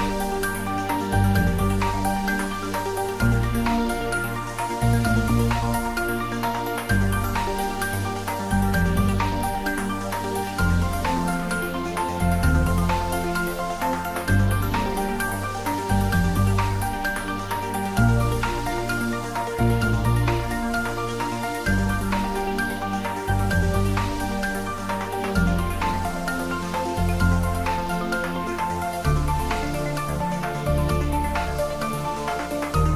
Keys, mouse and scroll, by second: 3.7 right click, 4.0-7.4 drag, 17.6 click, 25.0 click, 25.6 Tab, 28.3 Tab, 30.9 click.